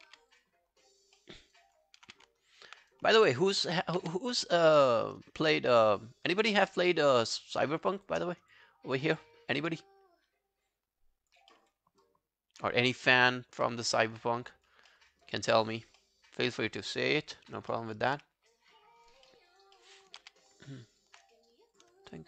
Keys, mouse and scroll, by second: 0.1 q, 0.7 alt+scroll down 1, 0.9 alt+click, 1.2 alt+middle click, 1.4 alt+right click, 1.6 alt+click, 2.0 alt+q, 2.4 alt+right click, 3.3 alt+middle click, 3.5 alt+right click, 3.8 alt+click, 4.0 q, 4.2 right click, 6.3 shift+click, 7.9 shift+click, 8.3 scroll down 1, 8.5 alt+click, 9.2 alt+middle click, 9.6 alt+click, 11.5 alt+middle click, 11.9 alt+scroll down 1, 12.0 alt+click, 12.9 alt+scroll down 1, 13.1 alt+middle click, 13.7 alt+middle click, 13.9 alt+right click, 14.9 alt+middle click, 15.1 alt+right click, 15.4 alt+click, 16.0 alt+middle click, 16.7 alt+click, 17.0 alt+right click, 17.3 alt+click, 17.7 alt+middle click, 18.0 alt+right click, 18.3 alt+click, 19.3 alt+middle click, 19.5 alt+right click, 19.8 alt+middle click, 20.0 alt+right click, 20.2 q, 20.9 alt+right click, 20.9 alt+right click, 22.2 shift+click.